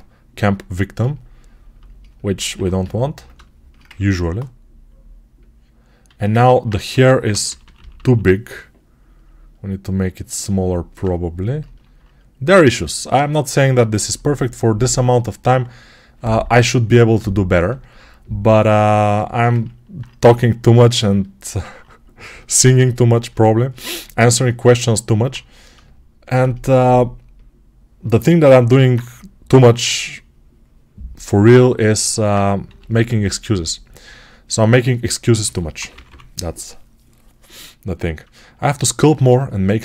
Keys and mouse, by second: 2.2-5.2 drag, 2.4 1, 5.2-16.7 alt+right drag, 6.0 alt+q, 6.8 g, 7.1-10.3 ], 29.4 x, 32.5 g, 35.6-39.8 right drag, 35.6 ], 35.8 ].